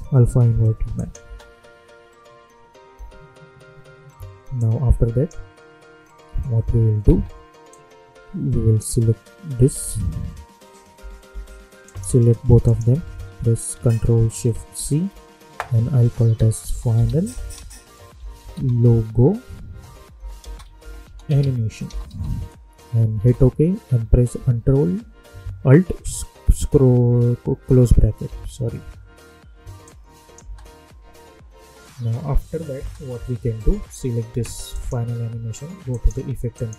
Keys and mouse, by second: 1.2 space, 4.5-6.5 drag, 6.5 space, 7.7-10.9 drag, 10.9 k, 11.2 j, 11.8 click, 12.6 shift+click, 14.8 ctrl+shift+c, 16.1-22.5 typing, 23.1 Return, 28.2 alt+], 29.8 click, 30.4 space, 32.7 space, 34.7 click.